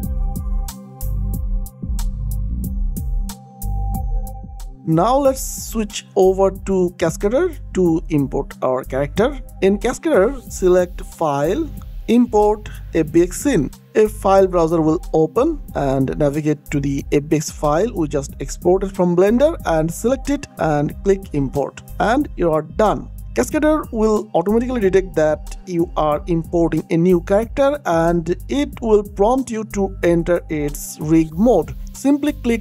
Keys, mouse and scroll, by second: 0.4 ctrl+v, 0.7 Return, 1.1 e, 1.6 p, 2.5 click, 4.7 click, 7.3 click, 14.3 click, 18.5 ctrl+c, 18.9 click, 19.5 ctrl+v, 20.0 Return, 21.7 click.